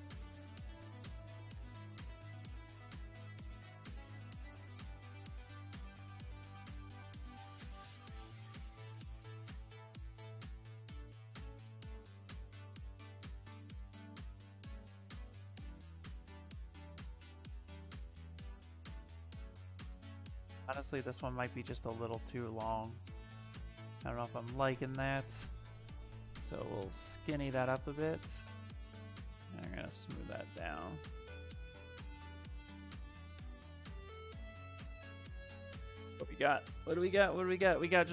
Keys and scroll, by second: 7.6 s, 9.8-10.7 typing, 11.6 ctrl+z, 14.4 s, 16.9 shift+f, 21.6 w, 24.1 q, 27.9 q, 34.8-35.9 typing.